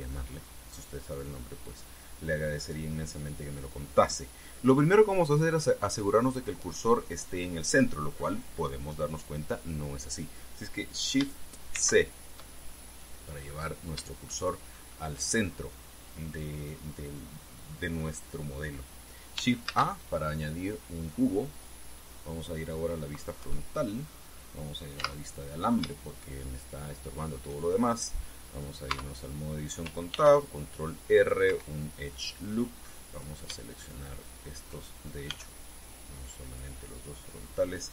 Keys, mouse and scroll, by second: 12.5 shift+c, 14.1-14.5 scroll up 2, 15.0 shift+middle click, 20.4 shift+a, 22.2 click, 24.1 KP_1, 25.7 z, 26.5 scroll up 2, 27.1-28.2 shift+middle drag, 29.6 Tab, 30.8 ctrl+r, 31.8 click, 32.2 Escape, 33.8 right click, 35.0 shift+right click, 36.0 b, 36.4-37.6 drag, 37.6 middle click.